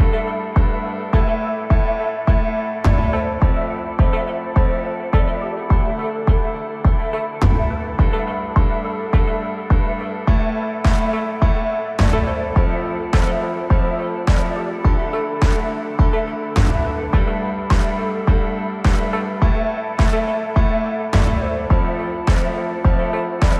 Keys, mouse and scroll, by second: 0.2-0.8 scroll down 1, 0.8-1.8 scroll down 1, 1.8 e, 4.2 s, 5.7-6.2 scroll up 1, 6.2 g, 10.0 g, 14.0 e, 16.8 s, 18.7-19.2 scroll up 2, 19.2 Tab, 19.6 scroll down 3, 20.3-21.7 middle drag, 21.7 KP_1, 22.3-23.0 scroll up 1.